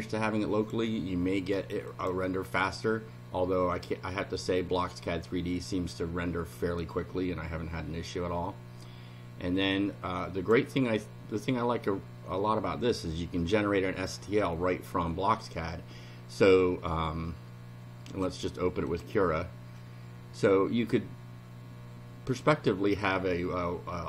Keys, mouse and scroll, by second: 1.9 click, 6.8 click, 7.3 scroll up 1, 7.9-8.5 scroll up 2, 9.6-10.7 drag, 14.1 click, 18.1 click, 18.9 click.